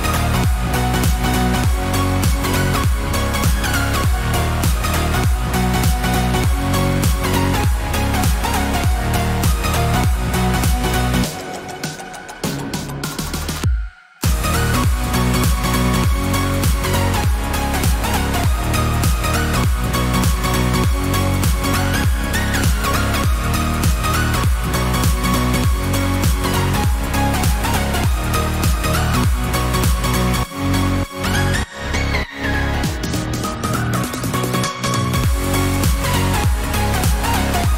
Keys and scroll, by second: 0.0 ctrl+-, 3.5 ctrl+o, 6.8 ctrl+=, 26.5 ctrl+t, 33.6 Return.